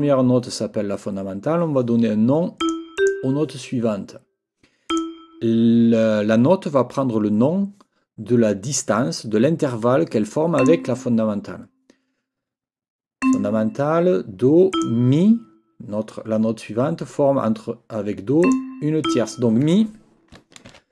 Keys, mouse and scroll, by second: 2.6 click, 3.0 click, 4.9 click, 10.6 click, 13.2 click, 14.7 click, 18.4 click, 19.0 click, 20.7 ctrl+t.